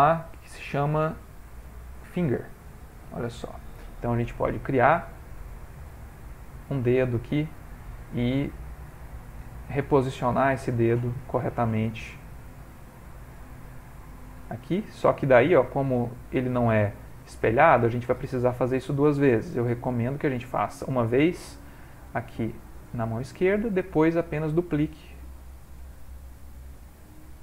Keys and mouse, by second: 4.7 click, 4.8 click, 5.9 g, 8.8 click, 9.4 shift+middle click, 10.2 g, 11.4 r, 12.1 s, 13.5 g, 14.5 s, 15.3 g, 16.1 s, 17.0 middle click, 20.4 click, 21.3 g, 25.8 s, 26.9 g.